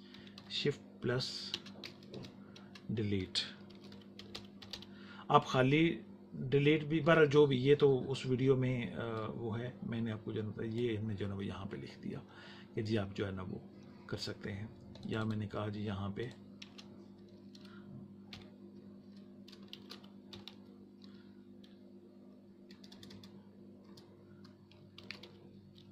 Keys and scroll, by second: 0.7 t, 3.0 space, 3.5 shift+d, 4.8 e, 16.5 space, 18.2 Home, 19.4-21.0 typing, 22.6 BackSpace, 24.7-25.9 typing.